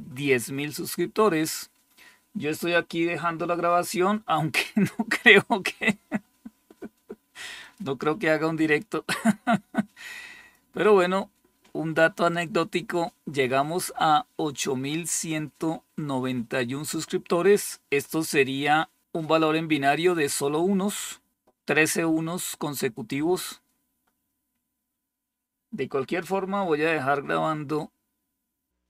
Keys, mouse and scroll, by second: 7.5 click, 8.9-10.4 drag.